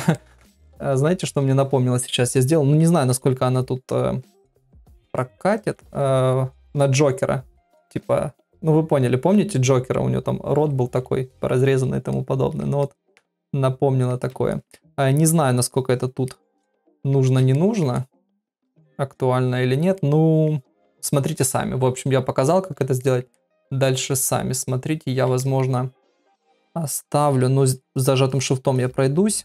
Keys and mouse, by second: 0.2 ctrl+middle click, 0.7 middle click, 1.2 ctrl+middle click, 4.2 middle click, 5.2 ctrl+middle click, 12.1 middle click, 12.8 ctrl+middle click, 13.4 middle click, 14.5 ctrl+middle click, 14.9 middle click, 15.7 shift+click, 15.9 shift+click, 16.3 middle click, 17.5 ctrl+middle click, 18.0-19.7 middle drag, 20.0 ctrl+middle click, 23.0 ctrl+middle click, 23.3-25.2 middle drag, 25.4 ctrl+middle click, 26.9 ctrl+click, 27.2 ctrl+click, 27.6 shift+click, 27.9 shift+click, 28.3 shift+click, 28.7 shift+click.